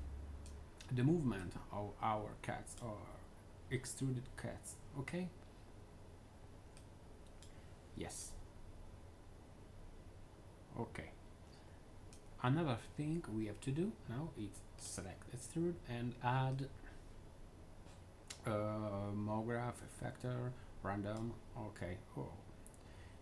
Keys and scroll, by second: 7.9-11.1 typing, 14.3 typing.